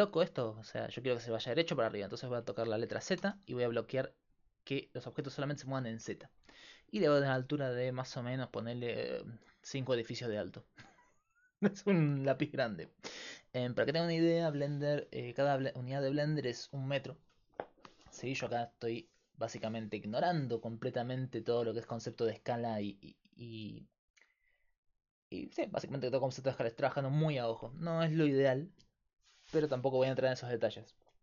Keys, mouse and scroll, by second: 11.2-13.8 drag, 13.8 Tab.